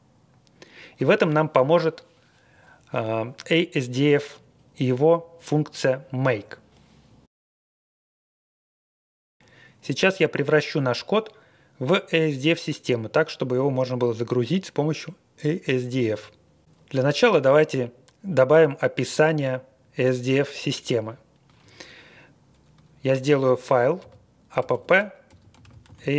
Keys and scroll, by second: 24.1-26.1 typing.